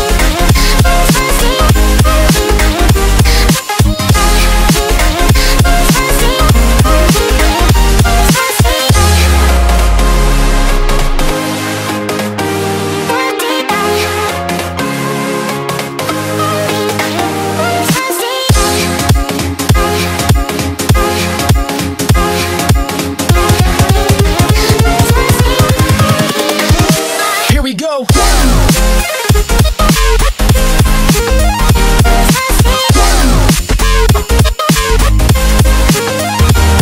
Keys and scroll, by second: 0.2 alt+super+space, 0.3 alt+super+space, 0.3 alt+super+space, 0.7 alt+super+space, 1.0 alt+super+space, 1.1 alt+super+space, 1.2 alt+super+space, 3.5 super+f, 11.6 super+z, 12.9 super+z, 14.1 super+x, 19.3 Tab, 28.9 Delete, 29.1 Delete, 31.4 space, 34.0 super+f, 35.5 shift+super+[.